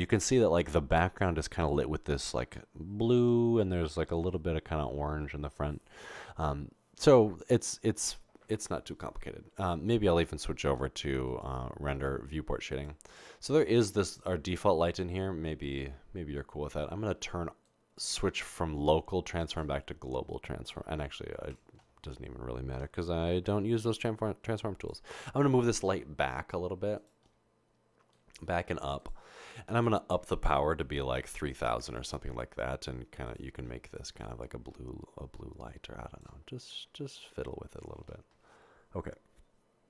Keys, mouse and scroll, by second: 23.9 typing, 26.5 typing, 28.4 typing, 29.8 click, 31.2-31.8 typing, 32.8 Return, 33.3 click, 34.8 typing, 37.4 0.